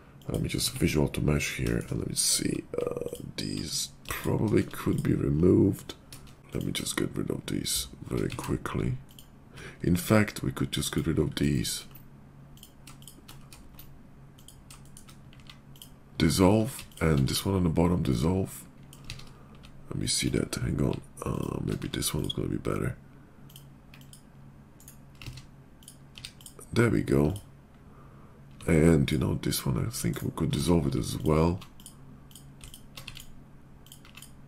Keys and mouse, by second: 0.5 Tab, 1.2 click, 2.9 alt+click, 4.0 alt+click, 4.2 alt+middle click, 4.4 alt+middle click, 4.7 click, 4.9-8.2 middle drag, 8.3 ctrl+z, 11.7-14.2 ctrl+middle drag, 14.2 ctrl+click, 14.5-16.6 ctrl+middle drag, 15.2 x, 17.0-19.0 middle drag, 17.1 x, 19.0 ctrl+z, 21.7 x, 23.9-25.8 drag, 25.2 ctrl+z, 25.8-28.9 middle drag, 26.0 x, 28.9 alt+click, 29.1-30.1 alt+middle drag, 30.1-31.1 drag, 30.5 ctrl+z, 31.1 alt+middle click, 31.2 alt+click, 31.6 middle click, 31.7 click, 32.2 middle click, 32.3 alt+click, 32.6 alt+middle click, 32.7-34.4 alt+drag, 32.9 x, 34.0 x.